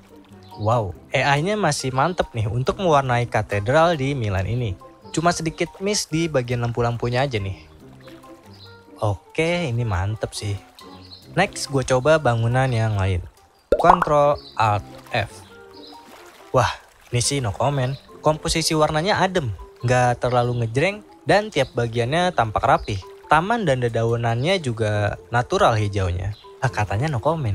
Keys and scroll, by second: 13.9 ctrl+alt+f.